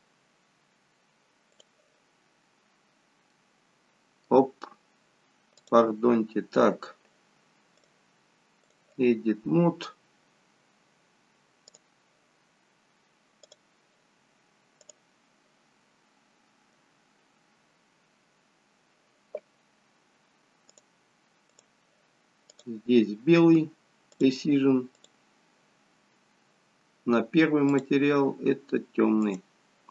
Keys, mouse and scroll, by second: 0.6 click, 3.0-3.5 scroll up 1, 3.5 middle click, 5.8 click, 10.2-10.9 scroll up 1, 10.9-11.4 scroll up 1, 11.8 click, 17.6 click, 17.6 scroll up 1, 17.8-18.4 scroll down 1, 18.4-20.4 scroll up 1, 20.4 scroll up 2, 20.9 click.